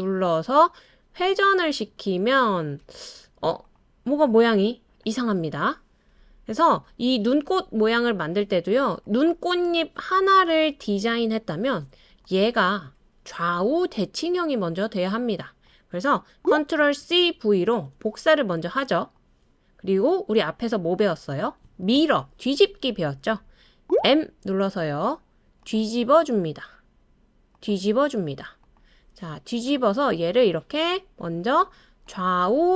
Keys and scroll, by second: 2.3 super+d, 2.8 super+d, 3.3 super+d, 11.2 BackSpace, 16.4 ctrl+c, 16.4 ctrl+v, 17.3 ctrl+c, 17.8 super+v, 23.8 m.